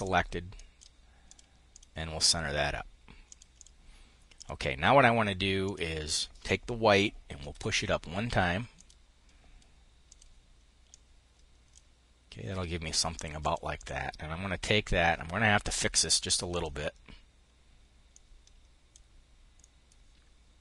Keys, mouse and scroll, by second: 2.8-4.4 drag, 5.1 click, 7.0 Up, 8.3-9.7 drag, 10.4-11.5 drag, 12.9 click, 16.0-18.6 drag, 19.1-20.3 drag.